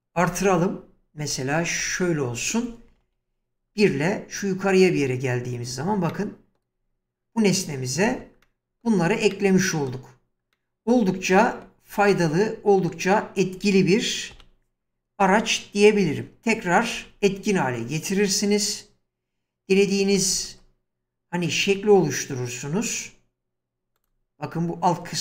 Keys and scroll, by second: 3.0 1, 4.9 space, 8.1 Escape, 14.3 1, 16.9 ctrl+x, 20.2 space.